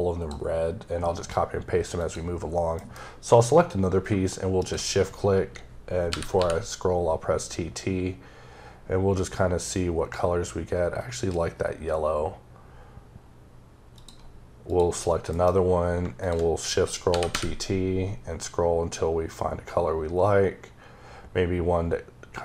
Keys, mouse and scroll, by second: 2.6 m, 3.8 shift+m, 4.4 shift+click, 5.9 t, 7.2-9.5 scroll up 6, 9.5-10.1 scroll down 1, 10.1-10.5 scroll down 1, 10.5 scroll, 10.6-11.3 scroll up 3, 11.3-12.0 scroll up 2, 12.0-13.4 scroll up 5, 13.8 click, 14.5 click, 15.2 m, 16.0 click, 16.9 t, 17.5-18.3 scroll up 4, 18.9-19.9 scroll up 2, 19.9-20.8 scroll up 1, 20.8-21.6 scroll up 3, 21.6-22.4 scroll up 2.